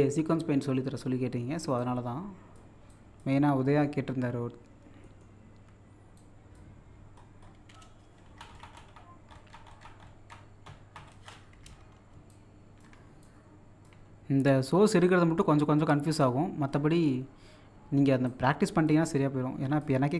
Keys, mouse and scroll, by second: 1.8 click, 3.6 middle click, 5.0 middle click, 6.2 click, 6.9-8.2 scroll down 1, 11.2-12.0 scroll up 1, 12.3 shift+scroll up 1, 12.3 shift+click, 13.5-14.8 drag, 14.8-16.7 shift+drag, 16.7 middle click, 18.3-20.1 shift+drag.